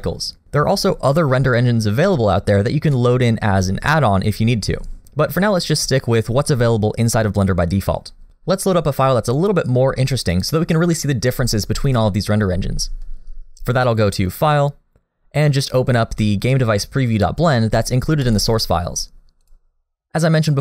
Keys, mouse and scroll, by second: 14.0 click.